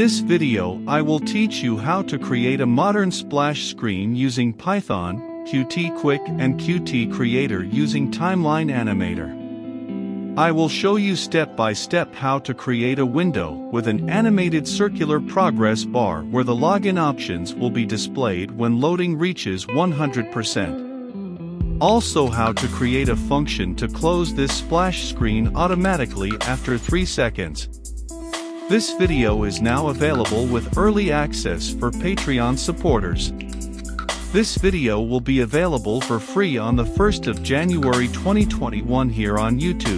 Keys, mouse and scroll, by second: 1.1-2.1 typing, 2.9-10.2 drag, 10.2 middle click, 11.1-14.5 drag, 14.5-15.5 typing, 16.4-32.5 drag, 33.4 middle click, 33.4 click, 34.0 middle click, 34.2 ctrl+v, 34.3-35.4 drag, 35.4 click, 35.5 ctrl+v, 35.5 middle click, 35.6 click, 36.3 ctrl+c, 36.3 click, 36.7 middle click, 36.8 click, 37.1 click, 37.1 middle click, 37.2 click, 37.6 middle click, 37.7 click, 37.8 middle click, 38.1 middle click, 38.1 v, 38.1 click, 38.3 middle click, 38.4 click, 38.8 click, 39.0 middle click, 39.1 click, 39.4 ctrl+c, 39.5 click, 39.8 ctrl+c.